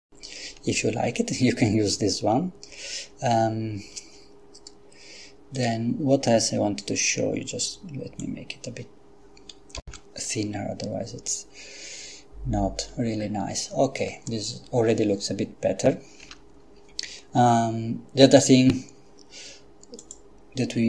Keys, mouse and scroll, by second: 5.5 click, 6.8-8.8 drag, 9.9 F12, 16.2 Escape, 20.0 click.